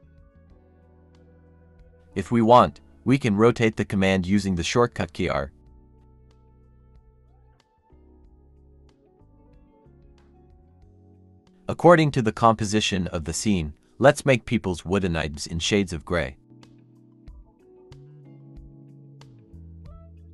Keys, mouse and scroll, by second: 0.5 typing, 1.6 scroll down 1, 1.7 scroll up 1, 2.2-7.1 typing, 3.0 shift+click, 3.2-3.5 scroll down 1, 3.7 Escape, 4.8 Return, 6.1 scroll down 1, 6.9 Escape, 7.2 Escape, 7.6 scroll, 7.7 middle click, 8.1 scroll down 1, 8.2 middle click, 8.4-11.3 typing, 9.5 Escape, 10.2 Escape, 12.3-15.5 typing, 12.7 scroll up 1, 13.2 scroll down 1, 14.0 scroll up 1, 14.6 scroll down 1, 16.6-20.1 typing, 19.2 scroll down 1, 19.8 scroll up 1.